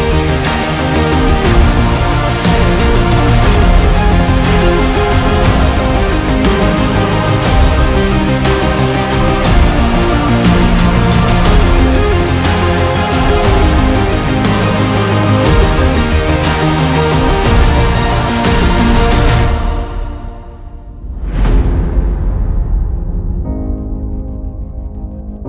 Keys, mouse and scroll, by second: 6.3-8.4 typing, 6.9 Right, 14.1-15.2 typing, 16.9 alt+scroll down 1, 17.0 alt+scroll up 1, 17.2-17.7 alt+scroll down 2, 17.7-18.1 alt+scroll up 1, 18.5 alt+scroll up 1, 19.6 alt+scroll down 1, 20.8 alt+scroll down 1, 21.3 alt+scroll up 1, 21.5 alt+scroll down 1, 21.9 alt+scroll up 1, 22.0 alt+scroll down 1.